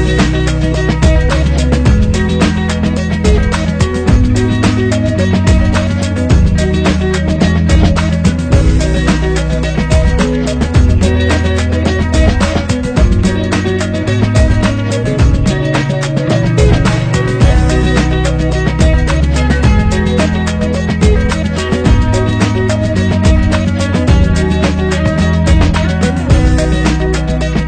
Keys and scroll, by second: 8.0 Up, 12.3 Up, 18.1 Up, 20.1 ctrl+0.